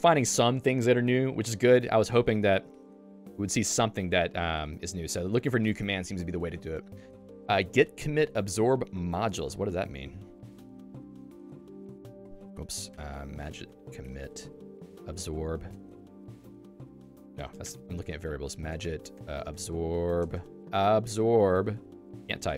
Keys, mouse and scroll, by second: 10.4 super+1.